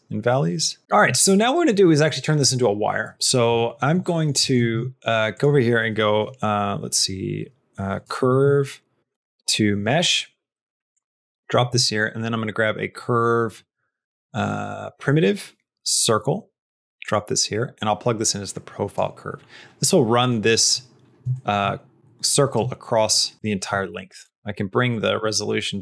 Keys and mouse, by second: 0.9 middle click, 1.1 shift+middle click, 4.0 middle click, 4.4 middle click, 4.6 shift+a, 11.3 click, 11.6 shift+a, 17.8-18.8 drag, 20.3 middle click, 21.2 shift+middle click, 22.5 shift+click, 24.1 shift+middle click, 25.0-25.8 shift+drag.